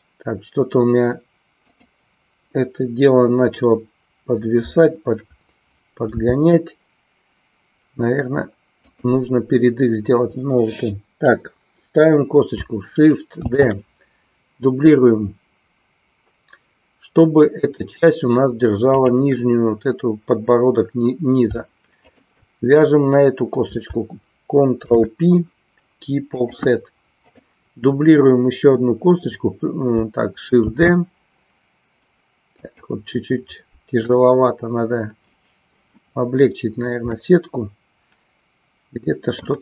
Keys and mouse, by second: 9.0 click, 13.5 shift+d, 22.2 shift+click, 27.4-28.4 drag, 31.2 shift+d, 33.2 click, 37.2-39.5 middle drag.